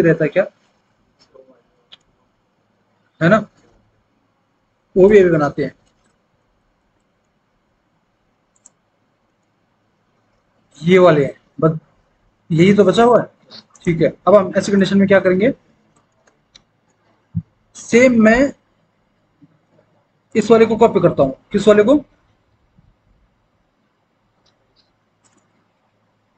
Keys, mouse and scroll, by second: 15.0 alt+w, 16.1 alt+w.